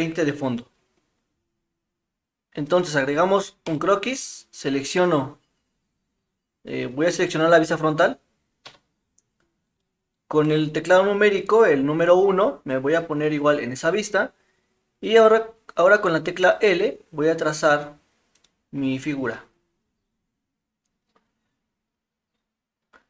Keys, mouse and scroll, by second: 2.7 click, 3.7 click, 8.6 KP_1, 9.8-10.3 shift+middle drag, 16.5 click, 18.4 click.